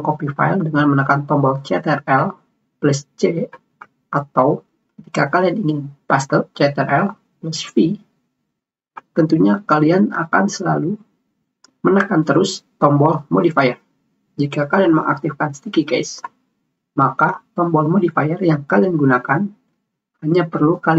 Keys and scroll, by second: 3.8 ctrl+c.